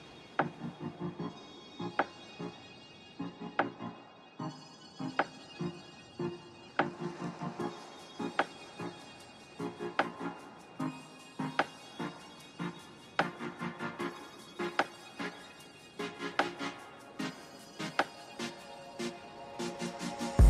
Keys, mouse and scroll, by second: 1.0 click, 2.0 middle click, 4.4 click, 5.1 click, 5.7 click, 6.6 middle click, 7.2 w, 8.2 click, 8.7 Right, 9.2 click, 10.0 right click, 10.0 click, 10.6 click, 11.0 click, 11.4 click, 11.8 click, 12.1 click, 12.7 click, 13.3 click, 13.5 right click, 14.2 click, 14.8 right click, 15.5 click, 15.8 click, 16.3 right click, 16.3 click, 16.6 middle click, 16.8 right click, 17.0 middle click, 18.6 click, 19.2 middle click, 19.3 middle click.